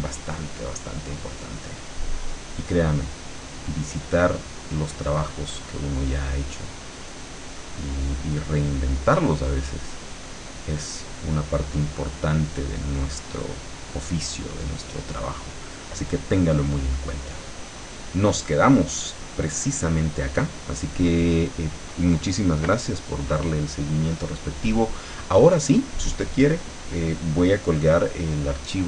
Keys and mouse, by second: 0.6 click, 2.4-3.7 drag, 4.1-5.3 drag, 6.7 click, 10.4 click, 11.4-13.0 drag, 17.9 click.